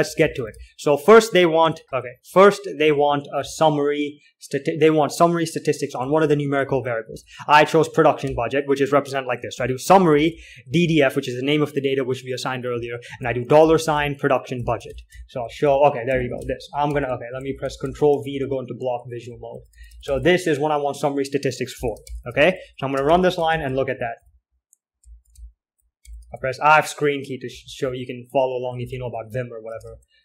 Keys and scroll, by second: 0.0-1.2 typing, 2.2 alt+Tab, 3.1 alt+4, 3.7 k, 6.4 alt+Tab, 6.7-12.0 typing, 13.2-30.2 typing, 15.2 ctrl+l, 18.5 ctrl+v.